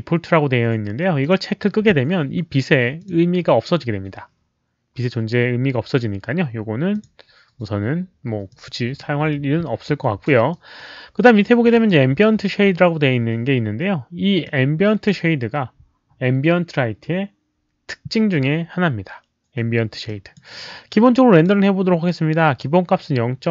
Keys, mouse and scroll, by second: 1.2 click, 2.9 click, 6.9 click, 8.4 click, 10.5-11.8 drag, 14.4 click, 20.0 click, 21.3 click.